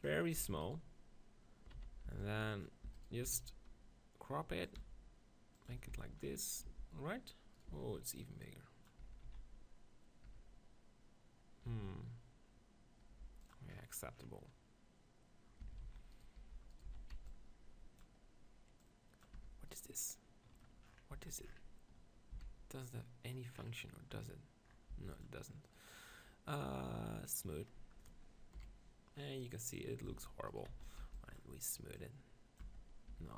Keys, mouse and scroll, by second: 0.5 Tab, 0.6-2.1 right drag, 1.8 z, 2.1 b, 2.9 e, 3.2 s, 4.8-7.1 drag, 5.3 e, 5.7 Tab, 5.9 z, 6.8 g, 7.7 Tab, 9.0 Tab, 9.3 z, 10.3 Tab, 11.7 Tab, 13.1 g, 13.5 click, 15.5 middle click, 15.6 Tab, 15.8 z, 16.1-18.6 right drag, 16.4 b, 16.9 z, 18.5 b, 18.8-20.7 drag, 19.4 Tab, 19.7-20.7 right drag, 21.1 z, 22.3 x, 24.9 x, 25.7-27.5 right drag, 27.3-28.7 drag, 28.6 KP_1, 30.1 Tab, 30.7 z, 31.0 b, 32.0-33.3 drag, 32.0 right click, 32.7 Tab, 33.1 r.